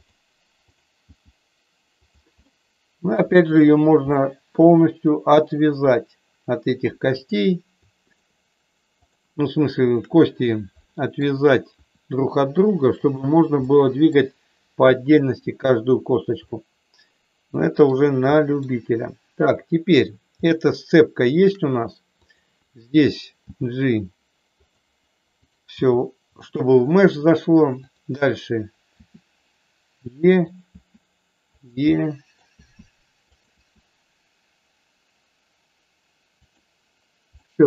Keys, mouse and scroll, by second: 1.2 g, 1.9 click, 2.5-3.6 middle drag, 4.1-5.2 middle drag, 9.1 shift+click, 10.8 middle click, 11.7 r, 13.1 click, 13.7 middle click, 16.5-17.8 middle drag, 18.3 middle click, 19.5 middle click, 20.4-21.4 shift+middle drag, 22.2 click, 23.6 g, 24.4 click, 25.3 click, 25.9 g, 26.4 click, 27.8 click, 28.9 e, 30.2 click, 30.7 e, 31.6 click, 31.9 middle click, 32.4 e, 33.2 click, 33.4 e, 37.4 middle click.